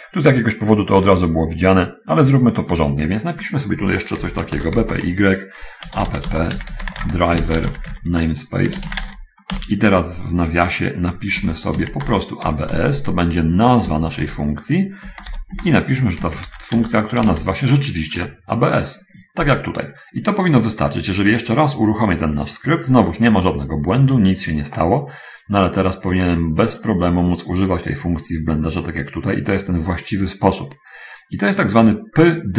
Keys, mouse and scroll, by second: 4.6-9.7 typing, 11.7-14.3 typing, 15.5-17.7 typing, 18.5 Return, 22.7 click, 27.1 right click, 30.7 middle click.